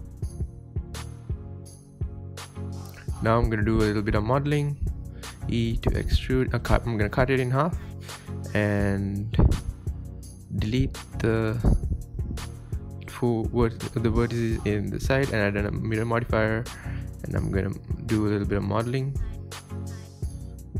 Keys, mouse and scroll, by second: 0.4-0.7 scroll up 4, 1.8-2.2 shift+middle drag, 2.2-2.5 scroll up 2, 2.5-2.9 shift+middle drag, 2.9 click, 3.1 Tab, 3.3-3.6 middle drag, 3.6 click, 3.8 scroll up 2, 4.0-5.1 shift+middle drag, 5.1 e, 5.4 scroll up 1, 5.6 scroll down 2, 5.9 ctrl+z, 6.3 Tab, 6.5-6.9 middle drag, 6.9 Tab, 7.2 ctrl+r, 8.3 KP_7, 8.5 scroll down 1, 8.7 shift+middle click, 9.2 alt+z, 9.5 scroll up 2, 9.7-11.7 shift+middle drag, 11.7 1, 12.6 scroll up 1, 12.8 shift+middle click, 13.0 click, 13.4 click, 14.1 x, 14.4 Tab, 15.9-17.0 drag, 17.0 Tab, 17.3 Tab, 17.5 scroll down 2, 17.7-18.3 middle drag, 18.3-19.0 scroll up 4, 18.5-18.8 middle drag, 19.0-20.0 shift+middle drag, 20.0 scroll up 1, 20.2-20.5 middle drag, 20.5 Tab.